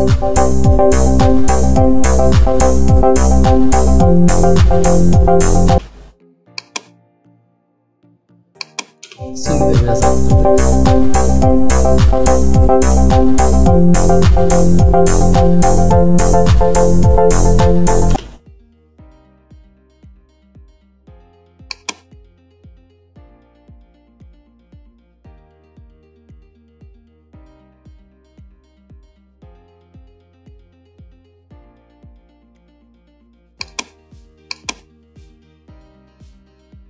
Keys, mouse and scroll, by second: 5.8 space, 6.7-9.1 drag, 9.1 space, 18.2 space, 21.8-36.8 drag.